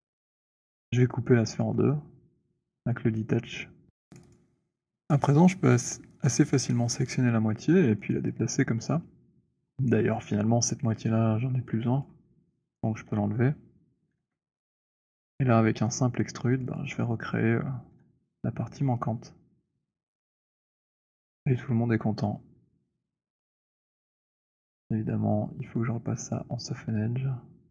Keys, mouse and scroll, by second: 0.8 click, 3.7 click, 4.3 click, 7.8 click, 11.8 click, 13.0 Delete, 14.0 w, 15.8 right click, 16.5 click, 20.8 shift+click, 23.5 shift+click, 26.5 click.